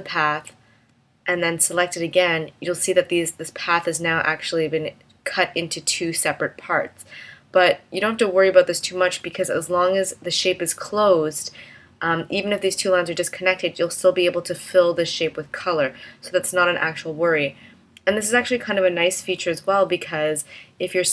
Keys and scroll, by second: 1.5 v, 8.1 v.